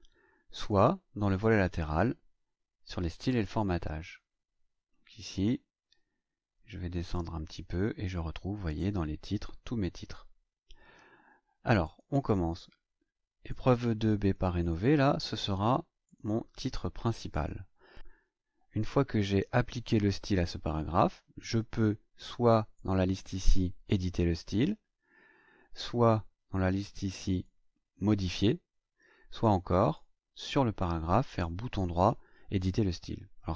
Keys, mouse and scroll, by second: 0.6 click, 3.3 click, 7.1-8.9 drag, 11.8 click, 13.5 click, 14.7 click, 16.0 click, 17.3 click, 21.4 click, 22.7 click, 26.8 click, 27.3 right click, 29.4 click, 29.8 click, 31.2 right click.